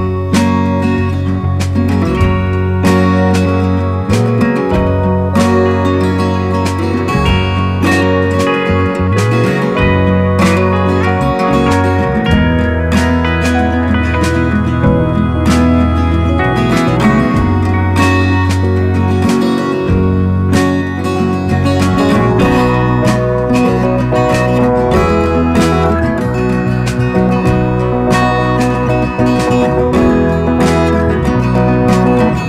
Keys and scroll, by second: 2.8 ], 5.4 [, 7.1 ], 7.2 ], 12.9 typing, 15.0 [, 15.1 ], 15.1 ], 15.5 [, 16.6 [, 17.5 ], 17.6 ], 18.9 ], 19.8 [, 26.6 alt+space.